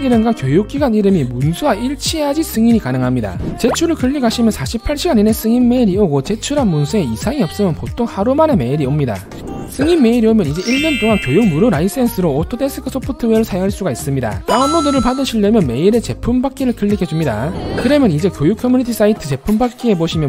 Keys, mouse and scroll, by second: 9.0 click.